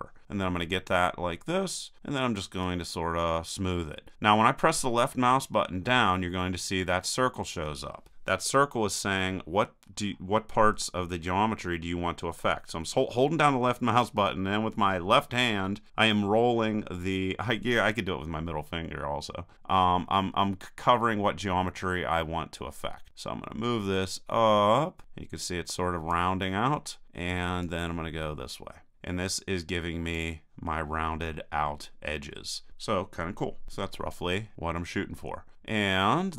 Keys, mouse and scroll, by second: 2.6-4.3 drag, 27.6-28.9 drag, 33.6 KP_1, 34.3-36.3 middle drag.